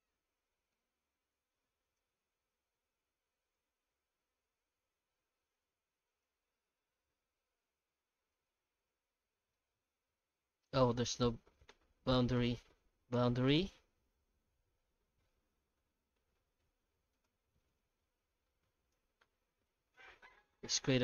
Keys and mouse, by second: 0.0-0.7 typing, 2.2 shift+z, 2.7 shift+z, 3.5 ctrl+z, 3.9 ctrl+z, 4.3 ctrl+z, 4.6 ctrl+z, 5.5 alt+a, 6.1 alt+shift+right click, 6.6 f, 7.6 i, 8.6 shift+z, 8.8 middle click, 10.7 middle click, 11.1 shift+z, 11.8 middle click, 12.3 i, 17.7 alt+s, 19.9 Tab, 20.5 shift+h, 20.8 Tab.